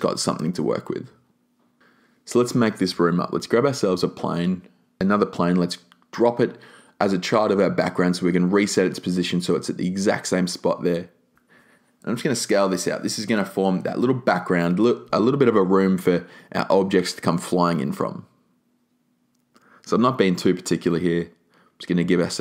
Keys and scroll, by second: 11.4 e.